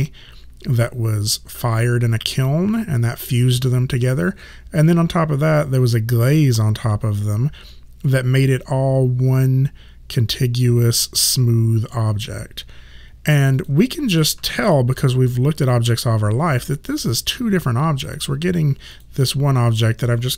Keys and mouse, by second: 13.6 click, 14.7 shift+click, 18.1 click.